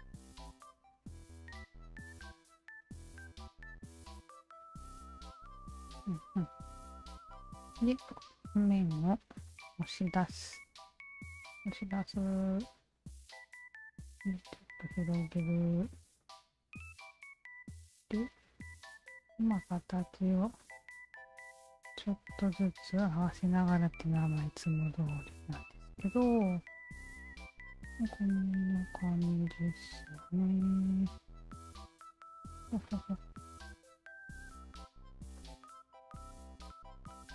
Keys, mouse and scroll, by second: 0.0 alt+click, 1.0 w, 1.6-3.2 alt+drag, 3.4-6.9 alt+drag, 7.5 3, 8.1 alt+click, 9.3 shift+q, 10.6 alt+click, 11.5-12.6 alt+drag, 13.2 r, 14.0-15.5 drag, 15.8 w, 17.6 click, 18.9 alt+click, 20.0 alt+click, 21.1 1, 21.4 alt+click, 22.3-23.3 alt+drag, 23.6 alt+click, 24.7 alt+middle click, 24.9 alt+middle click, 25.6-27.3 alt+drag, 27.6 alt+click, 28.4 click, 29.4-30.6 alt+drag, 31.0 e, 31.9 alt+click, 32.9 ctrl+z, 33.6-35.1 drag, 35.3-37.3 alt+drag.